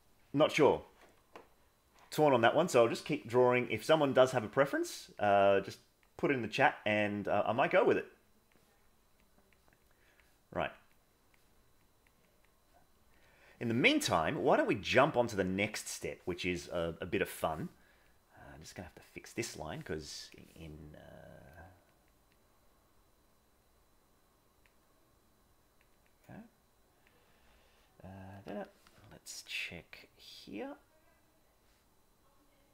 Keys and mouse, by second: 3.0 middle click, 4.8 click, 5.5 click, 6.9 click, 7.6 click, 8.3 click, 9.2 click, 9.9 click, 10.6 click, 11.0 click, 11.7 click, 12.3 click, 13.2 click, 14.9 middle click, 15.6 middle click, 18.1-19.5 drag, 21.2 click, 21.7 click, 22.0 click, 22.4-24.6 drag, 25.1 click, 26.3 click.